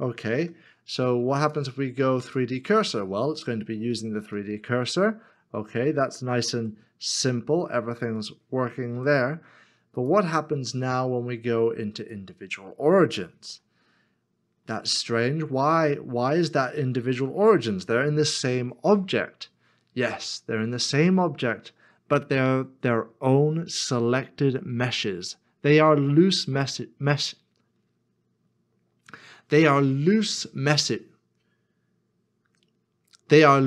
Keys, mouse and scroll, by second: 0.3 r, 0.4 ctrl+z, 4.4 r, 6.5 z, 8.9 ctrl+z, 13.4 r.